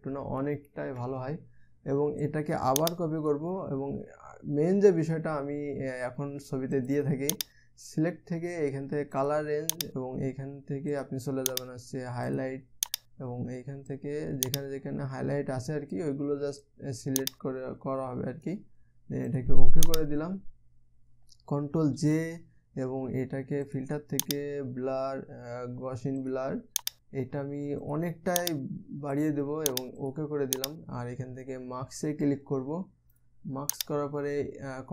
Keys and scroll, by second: 22.6 ctrl+j.